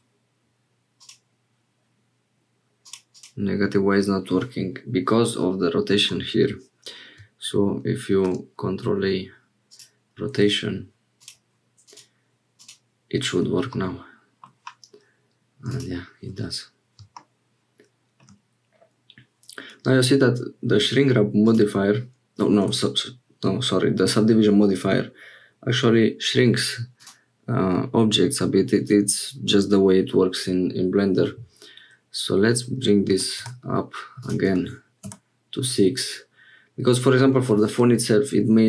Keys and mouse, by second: 1.0 click, 2.8 click, 3.1 click, 8.1 ctrl+a, 11.2 click, 11.8 click, 12.6 click, 13.7 middle click, 15.7 click, 26.9-33.8 drag, 34.2-35.7 drag.